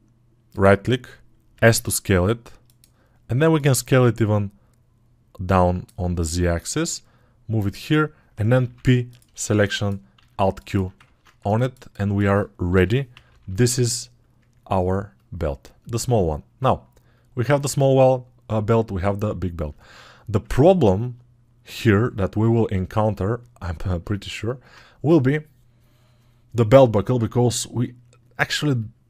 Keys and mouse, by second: 11.1-19.8 ctrl+drag.